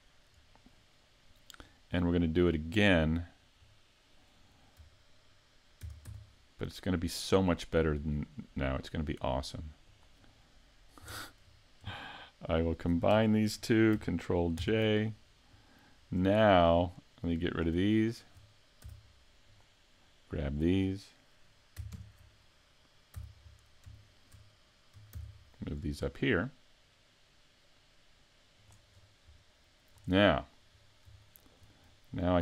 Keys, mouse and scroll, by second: 1.3-1.7 scroll down 3, 1.7 middle click, 3.7 middle click, 5.8 shift+d, 10.0 click, 10.3 middle click, 11.2 shift+middle click, 12.4 shift+right click, 14.6 ctrl+j, 16.0-16.4 scroll down 3, 16.4 shift+middle click, 17.5 right click, 18.0 shift+right click, 18.8 x, 20.6 right click, 22.0 ctrl+KP_3, 23.2 z, 24.0 shift+middle click, 25.1 shift+d, 28.7 click, 29.0-29.5 scroll up 3, 29.5 shift+middle click, 29.5 scroll up 1, 30.1-30.8 scroll down 1, 30.8-31.2 scroll down 3, 31.2 shift+middle click, 31.9 middle click.